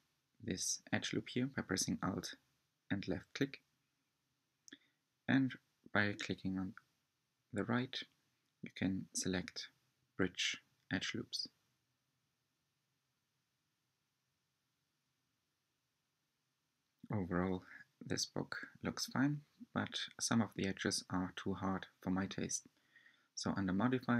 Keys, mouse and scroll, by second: 0.9 alt+click, 2.9 alt+shift+click, 5.9 right click, 6.5-7.1 scroll down 4, 7.8 Tab, 8.3-11.4 middle drag, 12.4-14.2 middle drag, 14.2-14.6 scroll down 2, 14.6-17.7 middle drag, 18.1 Tab, 19.1 Tab, 20.4-23.5 drag.